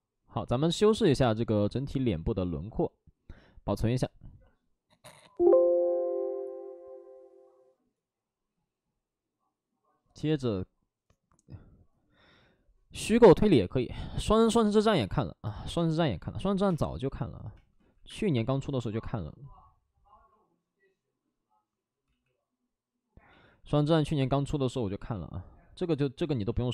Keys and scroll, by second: 15.7-18.0 typing, 17.7 ctrl+z, 22.0 ctrl+z, 23.4 ctrl+z, 23.5 ctrl+z, 23.7 ctrl+z.